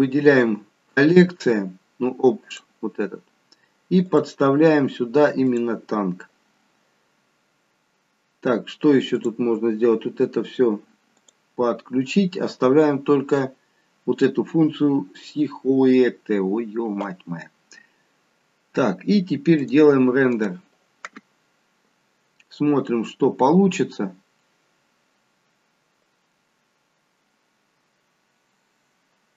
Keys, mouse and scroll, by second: 2.4 click, 3.1-3.7 scroll down 1, 3.7 scroll down 2, 4.1 click, 9.2 click, 11.5 click, 19.5 click.